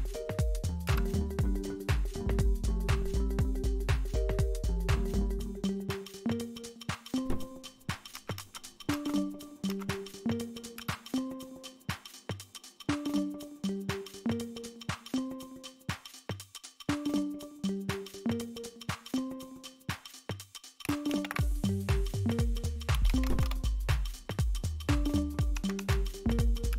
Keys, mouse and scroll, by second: 0.8 Return, 8.1 Up, 8.3 Up, 8.8 Up, 9.6 Up, 10.7 Return, 13.6 click, 18.7 click, 21.1 alt+super+r, 22.7-23.9 typing, 25.5 Down, 25.7 Down, 26.6 Return.